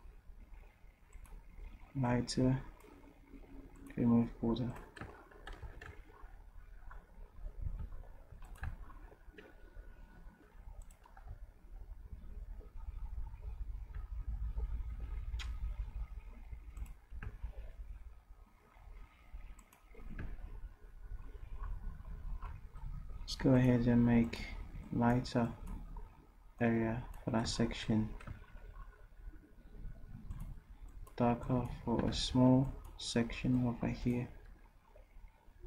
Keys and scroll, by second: 5.7 v, 10.4 Delete, 32.1 ctrl+z.